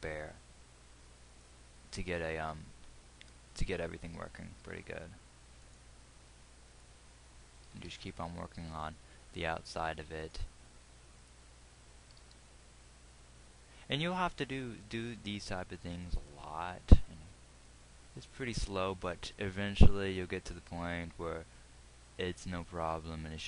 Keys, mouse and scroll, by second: 2.6 g, 8.2 g, 12.5 g, 19.5 g.